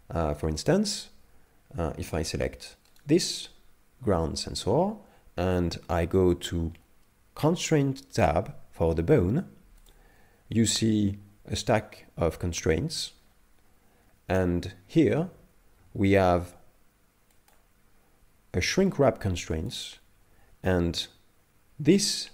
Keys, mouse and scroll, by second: 3.0 right click, 9.8 click, 12.2-12.9 scroll down 8, 13.1-13.7 scroll up 8, 13.7-15.6 scroll down 2, 17.4 click, 18.9 click.